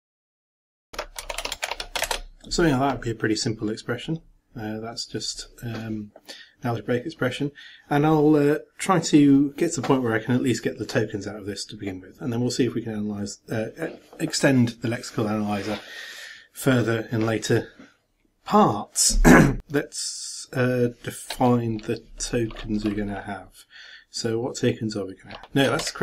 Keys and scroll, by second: 0.6-2.1 typing.